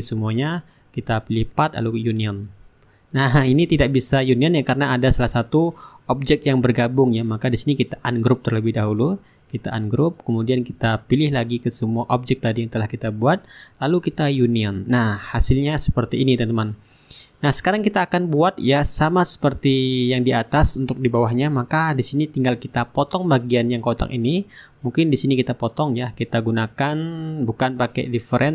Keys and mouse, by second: 0.5 click, 2.1 click, 6.2-8.9 drag, 7.8-8.9 right drag, 9.1 click, 11.1 shift+click, 13.2-15.4 drag, 15.6-17.8 shift+drag, 16.0-17.5 shift+right drag, 16.7-17.8 middle drag, 18.6-20.3 drag, 19.1-20.3 right drag, 22.2-24.9 drag, 25.1-27.2 drag, 27.4 click.